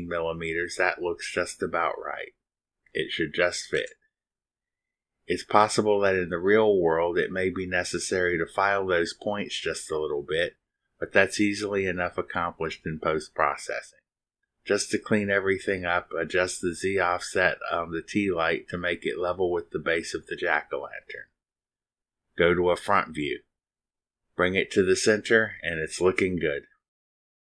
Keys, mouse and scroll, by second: 0.6 click, 3.7 click, 16.0 click, 17.3 click, 19.6 click, 20.9 click, 21.8 click, 23.4 click.